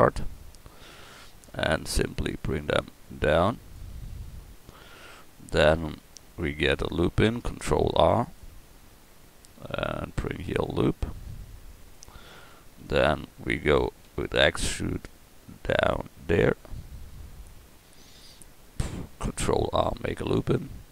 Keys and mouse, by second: 0.6-2.7 right drag, 4.9-7.9 drag, 7.9 ctrl+r, 12.4 click, 14.1 e, 19.9 ctrl+r.